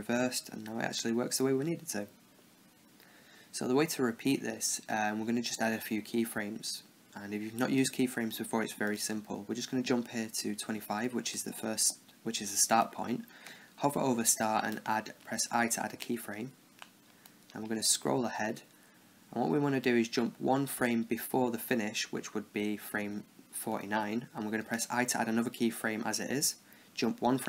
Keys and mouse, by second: 8.7-11.5 drag, 14.5 i, 17.4-19.4 drag, 19.7 click, 21.3 Left, 24.6 i, 26.5 Right.